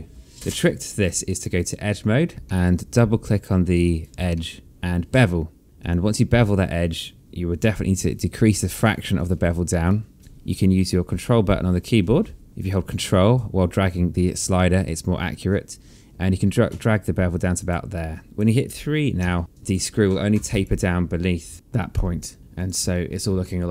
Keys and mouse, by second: 0.4 alt+middle click, 1.3 right click, 3.0 alt+middle click, 4.3 click, 4.8 alt+middle click, 6.3 click, 9.6 click, 12.1 ctrl+click, 18.4 right click, 19.1 click, 19.6 alt+click, 21.0 alt+click, 21.9 alt+click, 23.3 alt+click.